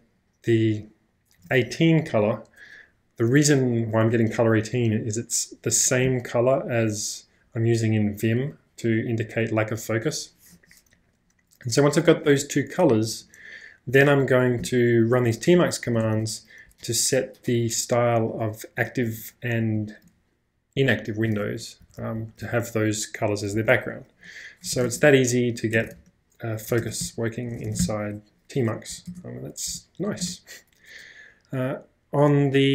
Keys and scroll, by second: 12.9 j, 14.6 w, 15.4 b, 15.8 w, 16.6 b, 19.6 j, 21.8 w, 22.0 w, 22.1 w, 22.4 w, 23.5 k, 23.7 k, 24.8 ctrl+\, 25.9 ctrl+space, 26.0 ctrl+-, 26.9 ctrl+space, 27.0 k, 27.7 ctrl+space, 27.8 ctrl+j, 28.9 e, 29.1 Return, 29.6 e, 30.3 Return.